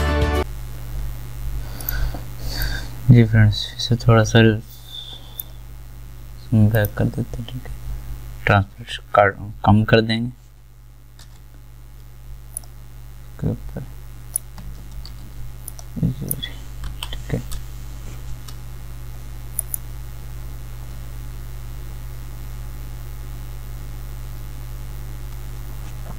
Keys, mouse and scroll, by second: 1.8-6.7 drag, 11.2 v, 15.1 ctrl+t, 16.9 Return, 19.6 click.